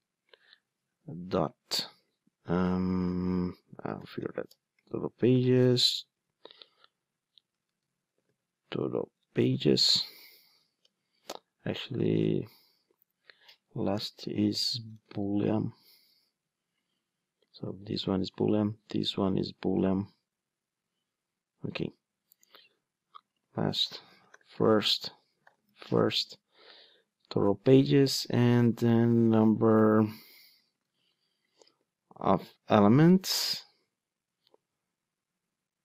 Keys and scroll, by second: 4.5 Return, 9.5 Return, 18.1 super+c, 19.0 super+v, 22.6 super+d, 28.1 super+d, 29.9 super+c, 30.9 super+v.